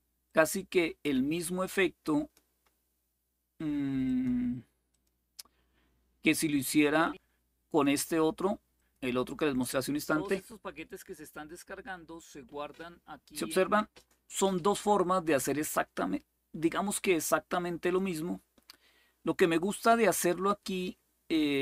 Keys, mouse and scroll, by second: 0.0-2.1 drag, 3.8 click, 4.7 click, 6.6-7.6 drag, 8.5 click, 13.5 click, 17.7-19.2 drag.